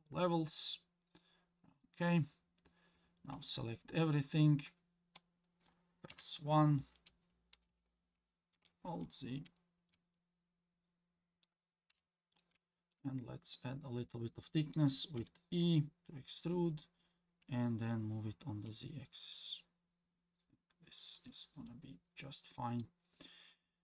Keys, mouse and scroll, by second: 1.2-1.9 scroll up 2, 1.9-2.9 scroll down 1, 3.3 a, 6.1 KP_1, 8.5 alt+z, 9.6 shift+middle click, 10.1 scroll down 1, 10.1-11.4 middle drag, 11.9 KP_1, 12.6 shift+middle click, 13.1-14.9 scroll up 2, 15.2 e, 21.7-22.8 middle drag.